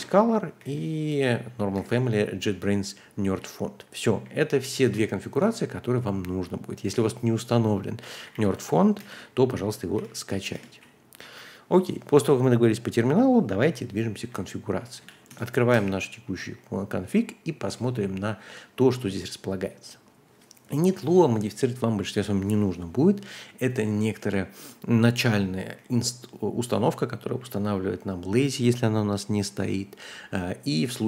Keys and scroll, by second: 0.0-0.6 typing, 1.7 shift+v, 2.4 Escape, 3.3-10.4 typing, 10.5 Return, 13.9-17.5 typing, 19.1 typing, 25.7-26.6 typing.